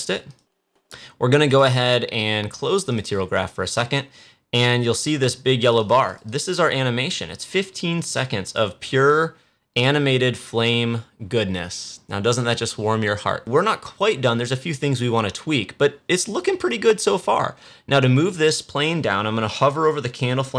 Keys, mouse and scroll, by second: 5.5 click, 13.4-15.7 drag.